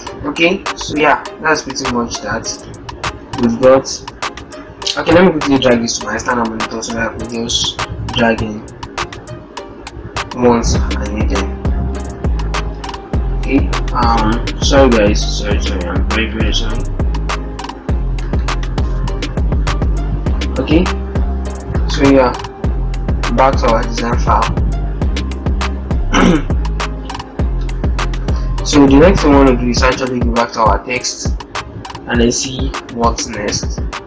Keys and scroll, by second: 3.3 alt+Tab, 12.3 super+d.